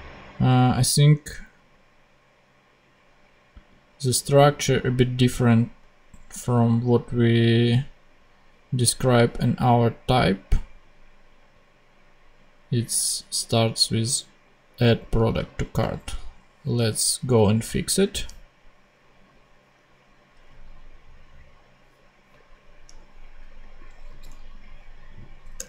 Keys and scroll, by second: 15.8 super+Tab, 24.0 super+c, 25.5 Return.